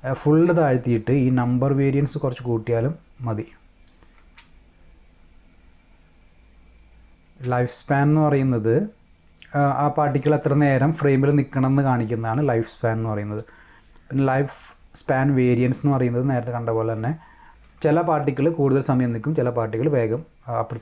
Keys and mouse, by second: 1.8-3.9 drag, 4.2 space, 7.3 space, 7.5-9.6 drag, 13.4 click, 15.9-17.5 drag.